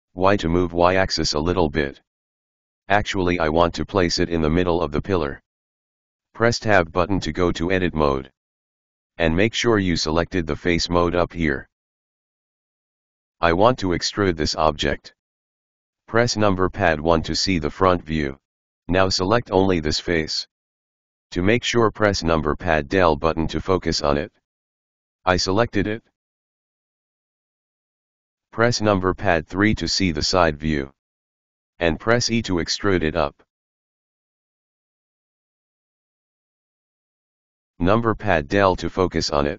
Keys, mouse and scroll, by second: 1.2 g, 6.3 click, 6.4 Tab, 13.9-17.6 middle drag, 17.6 KP_1, 18.9-21.8 middle drag, 21.8 right click, 23.4 KP_Decimal, 24.2-25.5 scroll down 12, 27.0-28.5 scroll down 16, 28.5 scroll down 1, 30.4 KP_3, 33.7 e, 38.8 KP_Enter.